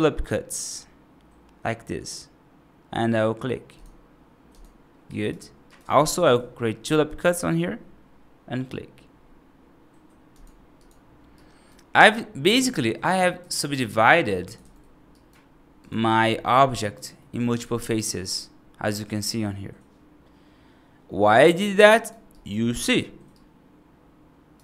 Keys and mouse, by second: 4.9 right click, 5.5 right click, 6.1 ctrl+r, 11.2 right click, 12.5 F2, 12.9 right click, 13.2 F3, 13.5 right click, 14.5 alt+z, 15.0 right click, 16.2 middle click, 16.7 right click, 17.0 middle click, 17.5 alt+z, 18.1-21.9 right drag, 22.2 right click, 23.2-24.4 right drag.